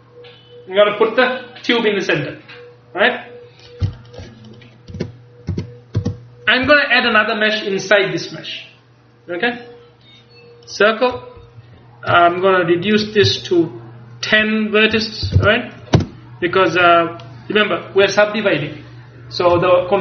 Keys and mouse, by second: 3.7-5.0 drag, 5.0 Tab, 5.6 Tab, 6.1 space, 12.9-17.3 drag, 17.3-18.7 middle drag.